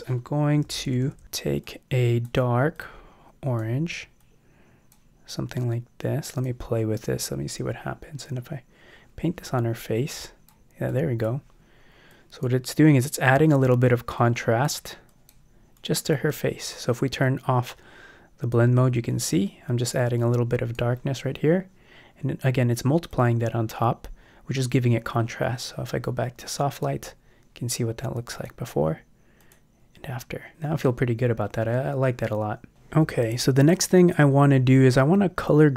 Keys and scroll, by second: 0.7 [.